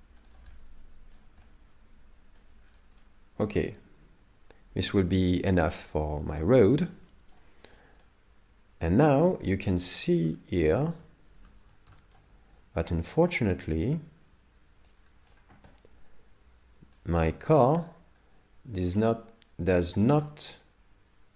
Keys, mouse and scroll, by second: 0.2 shift+middle click, 0.5 middle click, 1.5 middle click, 2.6-3.0 scroll down 6, 3.0 middle click, 6.7 shift+middle click, 7.0 middle click, 7.7 scroll up 5, 8.0 middle click, 9.5 scroll up 2, 9.8 middle click, 10.4 shift+middle click, 11.3 shift+space, 11.9 shift+middle click, 14.9 click, 17.0 click, 19.1 middle click, 19.9 shift+middle click, 20.3 middle click.